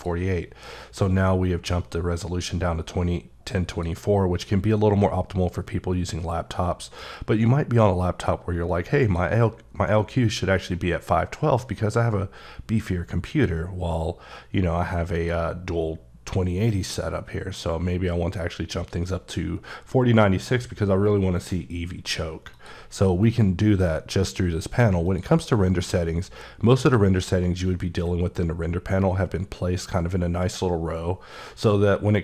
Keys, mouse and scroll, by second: 3.7 click, 9.0 click, 13.3 click, 15.1 click, 22.5 click, 25.0 click.